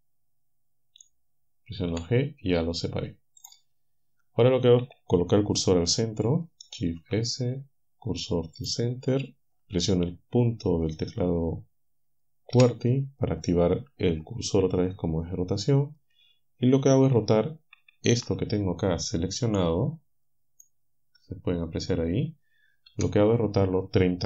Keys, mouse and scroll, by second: 1.9 g, 6.9 shift+s, 8.6 click, 12.6 ., 19.6-20.8 drag, 22.9 KP_7.